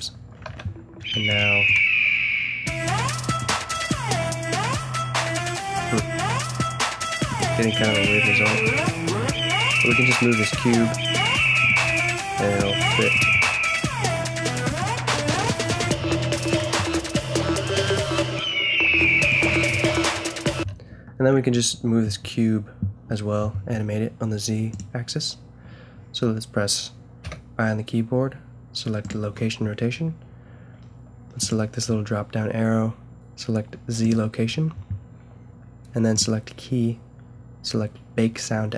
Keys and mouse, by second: 0.0 0, 0.5 alt+a, 3.7 g, 7.9 g, 11.8 g, 13.4 g, 15.4-16.8 middle drag, 16.9 g, 18.1-20.0 drag, 20.5 Escape, 27.2 i, 31.4-33.2 drag, 34.0-35.7 drag.